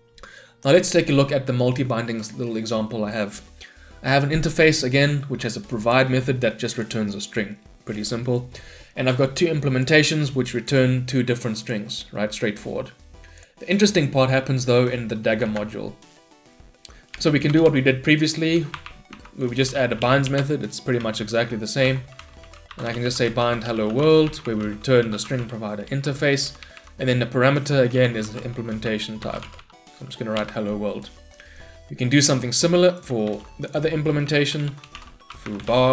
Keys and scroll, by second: 17.0 ctrl+y, 20.1 Return, 25.9 Return, 30.4 Return, 33.5 ctrl+d, 34.4 ctrl+Delete.